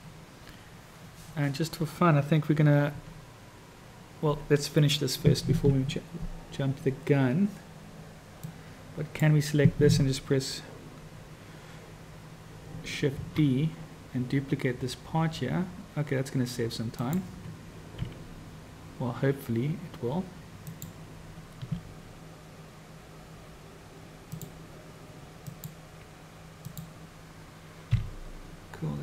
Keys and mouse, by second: 8.6 click, 13.2 shift+d, 18.0 r, 21.6 g, 25.6-26.8 drag, 28.1 g.